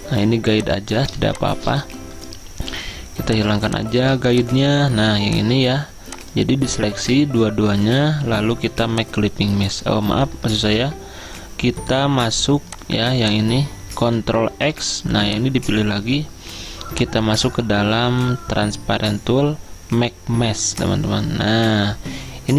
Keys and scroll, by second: 1.2 space, 7.0 ctrl+z, 10.7 ctrl+z, 14.6 ctrl+x.